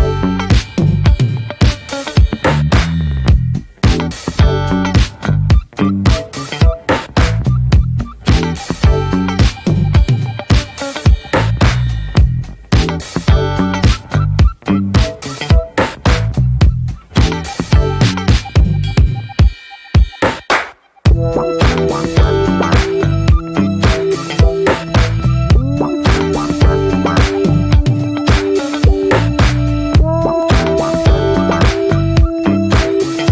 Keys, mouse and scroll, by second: 0.5 middle click, 0.8 click, 1.8 shift+middle click, 2.3 click, 2.9 middle click, 3.5 click, 4.1 middle click, 4.3 click, 4.9 middle click, 5.2 click, 6.0 middle click, 6.4 click, 6.7 middle click, 7.0 click, 7.4 shift+middle click, 7.5 scroll up 1, 7.7 shift+click, 8.2 middle click, 8.4 ctrl+z, 8.6 middle click, 9.1 ctrl+z, 9.2 middle click, 9.5 click, 10.0 middle click, 10.3 shift+click, 11.2 middle click, 11.6-12.6 drag, 12.6 middle click, 12.9 click, 13.3 middle click, 13.6 click, 14.0 scroll down 2, 14.1 middle click, 14.2 click, 15.2-15.8 middle drag, 15.8 click, 16.0 click, 16.2 click, 16.4 click, 16.5 scroll down 1, 16.8-17.7 alt+middle drag, 17.7 scroll down 1, 17.8-18.1 middle drag, 18.1 ctrl+s, 18.3-19.1 shift+middle drag, 19.1 ctrl+s, 19.2 scroll down 1, 19.3-20.0 middle drag, 20.0 ctrl+s, 20.3 click, 20.6-21.4 middle drag, 21.4 scroll up 1, 21.5-22.6 shift+middle drag, 22.6 ctrl+s, 22.7 shift+middle click, 23.3 ctrl+s, 24.1-25.1 drag, 25.1 middle click, 25.6 click, 25.9 middle click, 28.5 middle click, 28.9-29.8 middle drag, 29.8 click, 30.1 click, 31.3-33.3 middle drag.